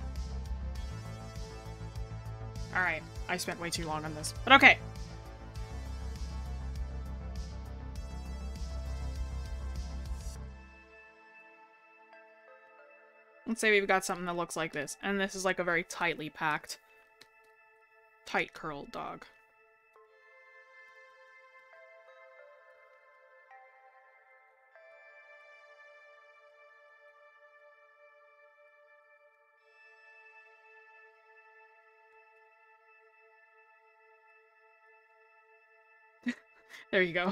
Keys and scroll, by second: 2.9 scroll down 1.